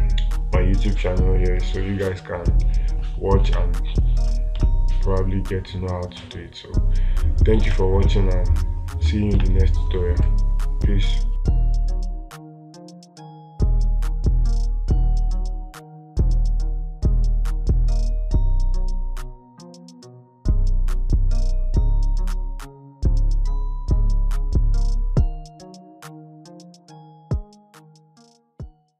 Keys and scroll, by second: 8.1 space, 9.8 space.